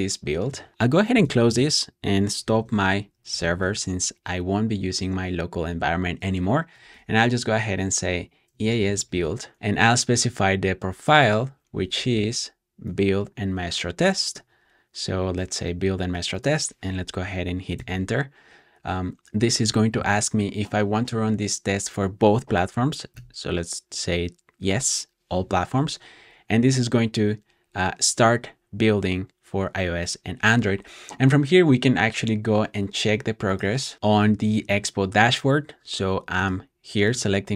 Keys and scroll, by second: 1.0 e, 1.1 Return, 2.3 ctrl+c, 2.5 ctrl+c, 3.0-3.8 typing, 6.4-9.5 typing, 17.4-18.1 typing, 22.8-23.6 typing, 32.7 typing.